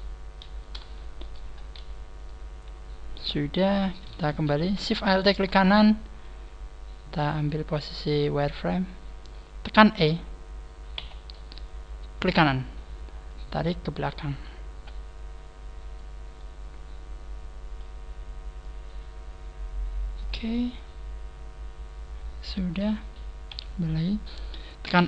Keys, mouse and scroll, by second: 0.9 shift+middle click, 1.4 scroll up 1, 2.4-3.1 scroll down 6, 3.4 shift+middle click, 4.2-4.5 scroll down 1, 4.2 a, 5.1 alt+shift+right click, 7.3 click, 8.1 click, 9.4-9.9 scroll up 6, 10.9 e, 12.3 right click, 13.3 right click, 13.3 click, 16.3 middle click, 18.5 click, 21.0 middle click, 23.4 KP_3, 24.9 e.